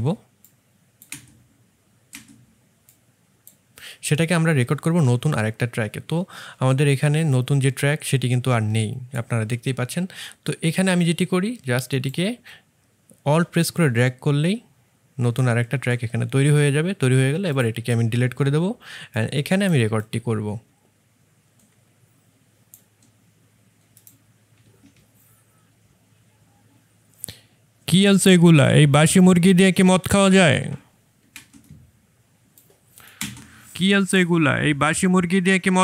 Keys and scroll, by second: 1.0 space, 18.2 Delete, 31.3 space.